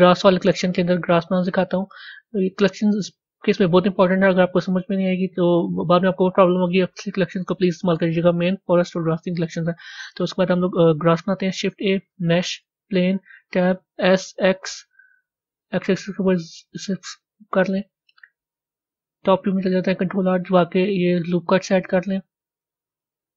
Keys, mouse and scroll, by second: 2.2 click, 4.4-23.3 middle drag.